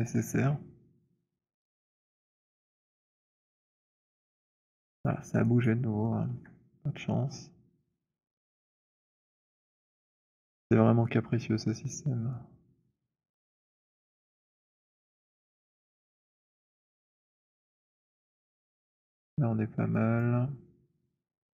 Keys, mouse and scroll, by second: 2.0 middle click, 5.1 alt+click, 5.7 alt+right click, 6.3 alt+middle click, 8.3 right click, 10.0 click, 11.6-13.8 typing, 13.3 middle click, 14.7 middle click, 15.5-17.6 typing, 17.6 middle click, 19.0 middle click, 20.2 click.